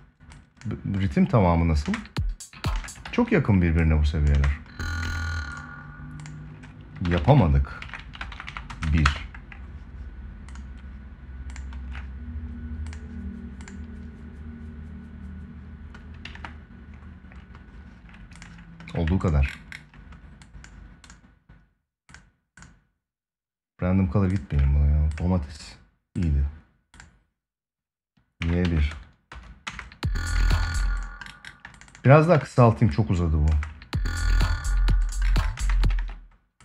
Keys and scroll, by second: 1.5 space, 2.7 ctrl+s, 4.1 space, 8.4 space, 16.0 ctrl+s, 29.4 space, 30.3 ctrl+s, 33.2 space, 35.3 space, 35.6 ctrl+s.